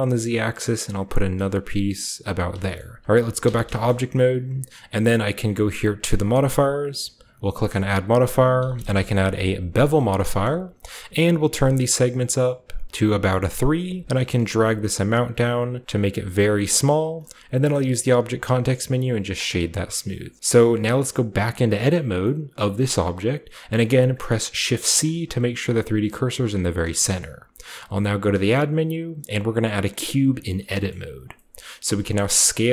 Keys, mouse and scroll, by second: 2.1 click, 2.5 shift+middle click, 2.7-4.4 shift+scroll up 2, 3.3 Tab, 3.8-5.6 shift+middle drag, 6.1 drag, 7.4 click, 8.5-8.8 typing, 9.9 click, 10.2-12.9 shift+middle drag, 10.4-11.6 shift+scroll up 1, 11.6-12.9 scroll up 1, 12.9 middle click, 14.0-19.4 shift+middle drag, 17.5 typing, 19.4-19.9 scroll down 2, 20.1-22.5 typing, 20.4 click, 22.5-23.6 middle drag, 23.6 click, 24.6-28.2 typing, 25.6 click, 26.8-27.7 scroll up 1, 27.7-29.9 shift+scroll up 1, 30.0-31.0 drag, 30.8 shift+middle click, 31.0-32.4 shift+scroll up 1, 31.5 shift+middle click, 31.8-32.7 shift+middle drag, 32.4-32.7 scroll up 1, 32.4 s.